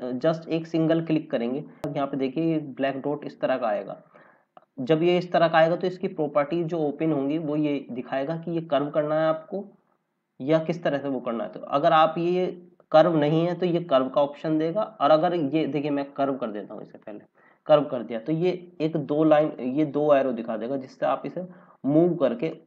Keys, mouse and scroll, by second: 0.4 click, 1.7-2.6 scroll up 1, 9.9 scroll down 1, 16.9 click, 19.5 click.